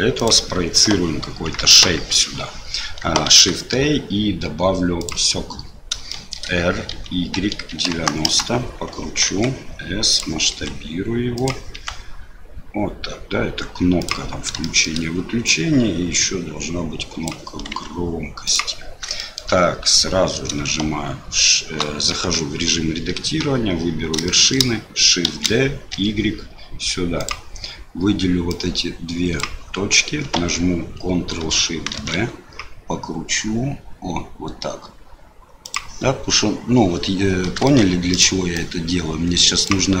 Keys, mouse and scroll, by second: 1.3 KP_1, 1.7 KP_3, 3.3 shift+a, 6.1 shift+click, 6.9 r, 9.2 s, 10.5 s, 11.7 s, 14.7 shift+middle click, 15.5-17.7 drag, 17.7 s, 19.2 shift+middle click, 22.1 Tab, 23.4 1, 24.2 shift+middle click, 25.5 shift+d, 28.5 click, 31.9 ctrl+shift+b, 37.8 shift+click, 38.7-40.0 drag.